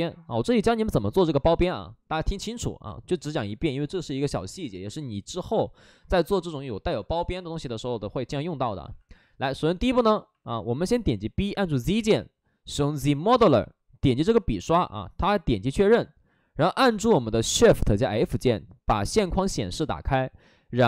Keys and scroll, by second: 9.6 alt+s, 9.9 space, 10.3 alt+s, 11.1 b, 11.5 z, 17.1 z, 18.1 shift+f.